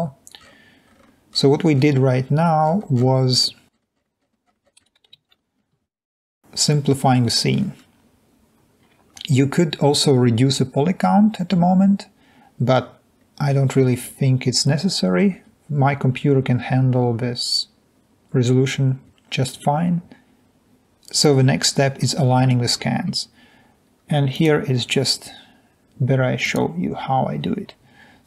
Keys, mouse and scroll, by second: 23.4 s.